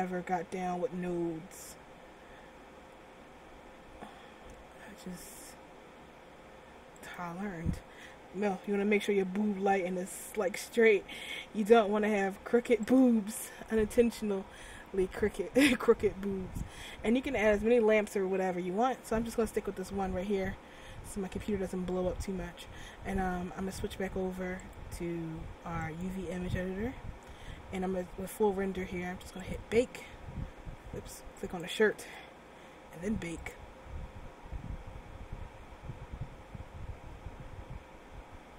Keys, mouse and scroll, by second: 8.8 r, 14.9-16.9 scroll down 2, 24.7 click, 29.5 click, 31.5 right click, 32.3 Tab, 33.5 click.